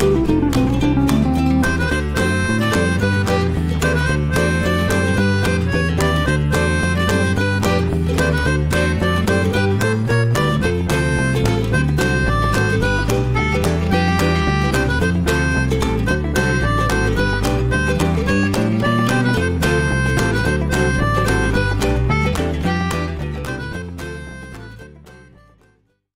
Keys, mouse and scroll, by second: 0.6-1.5 drag, 1.5-3.8 middle drag, 3.8-8.1 drag, 8.1-9.2 middle drag, 9.2 click, 9.7-13.2 shift+middle drag, 13.2-13.6 scroll up 1, 13.6-14.5 middle drag, 14.5 click, 14.9 click, 15.4-26.1 shift+middle drag.